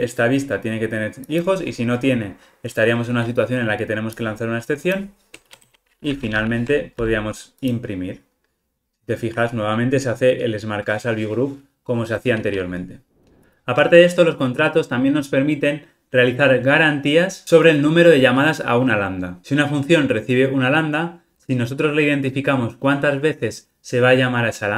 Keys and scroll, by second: 6.4 alt+super+l.